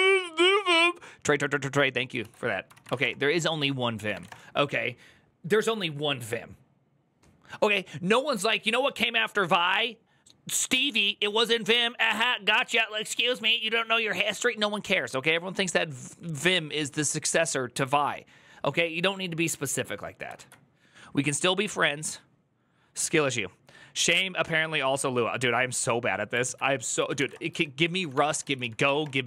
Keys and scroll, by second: 2.0 alt+{, 2.4-4.0 typing, 4.1 Return, 26.3 alt+{, 26.7-28.8 typing, 28.2 ctrl+u.